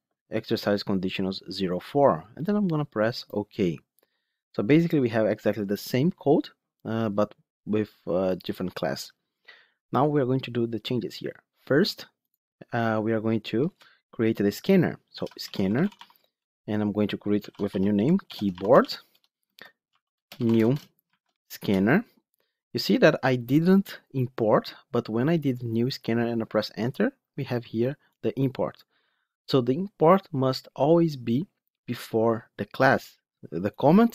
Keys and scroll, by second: 21.5 Return, 25.6 Return.